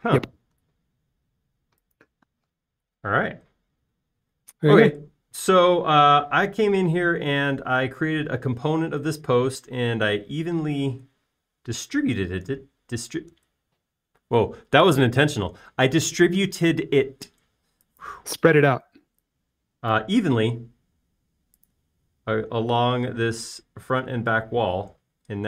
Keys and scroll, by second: 15.8 shift+space, 20.1 typing, 21.3 typing.